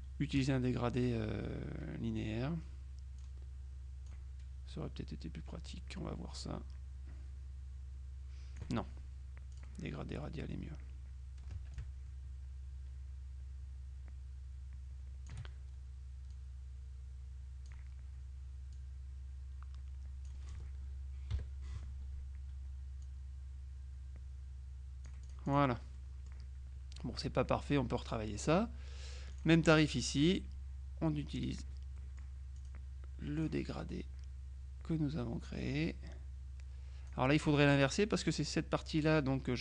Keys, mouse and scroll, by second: 0.5 click, 3.3 click, 5.7-9.2 drag, 9.6 click, 11.9-15.9 ctrl+drag, 16.4-18.3 drag, 18.8-20.8 drag, 21.4 KP_Subtract, 23.1-26.1 drag, 26.1 middle click, 28.1 middle click, 29.4 click, 29.9 middle click, 31.5 click, 32.7 middle click, 33.5 click, 35.7-37.7 drag.